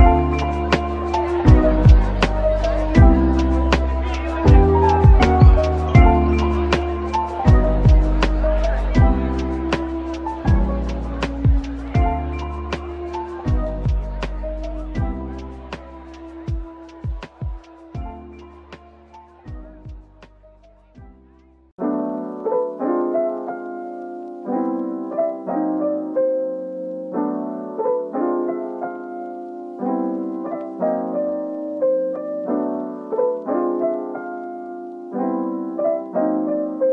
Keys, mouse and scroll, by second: 1.8 middle click, 3.0 Tab, 3.4 scroll down 1, 3.5 Tab, 4.5 typing, 5.9 middle click, 14.6 shift+click, 15.4-15.8 scroll down 1, 15.9 shift+click, 16.4 shift+scroll down 1, 16.8 middle click, 17.5-19.1 typing, 23.2 typing, 24.8 typing, 25.8 right click, 26.7 ctrl+z, 26.9 ctrl+z, 28.1 Tab, 31.2 typing, 32.3 typing, 34.6 typing, 34.9 Return, 35.2 Tab, 36.2 double click.